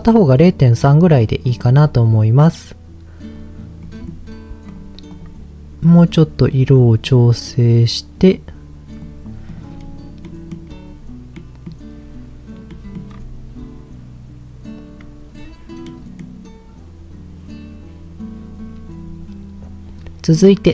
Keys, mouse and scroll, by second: 0.3-0.8 middle drag, 1.2-1.5 middle drag, 3.8 middle click, 4.0-4.6 scroll up 1, 4.6 click, 5.1 click, 9.4 click, 9.7-10.5 scroll down 3, 10.2 middle click, 11.4-11.8 middle drag, 12.7-13.0 middle drag, 13.1-13.8 scroll up 2, 15.9-16.2 middle drag, 19.4-20.5 middle drag.